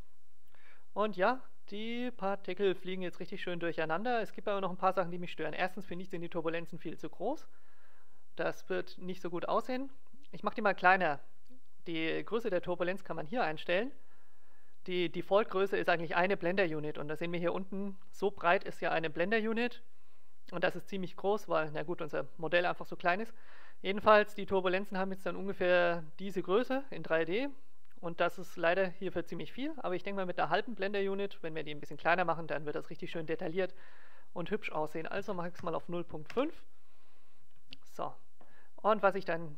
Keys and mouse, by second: 5.6 alt+a, 34.2-36.0 drag, 37.5 alt+a.